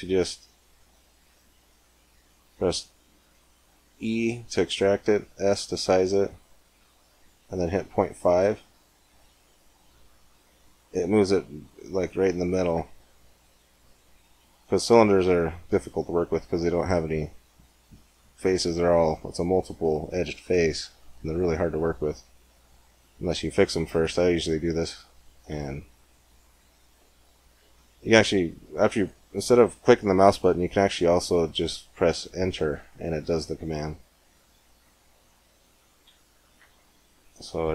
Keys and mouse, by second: 3.8 e, 5.3 s, 11.9-13.2 drag, 13.2-15.0 middle drag, 25.4 e, 34.2 s.